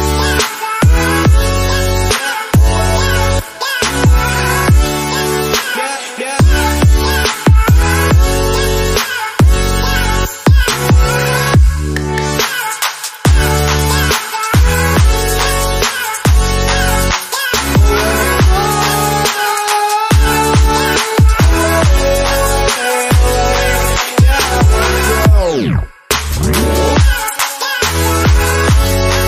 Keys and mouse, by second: 10.9-19.6 drag, 19.6 g, 28.9 click.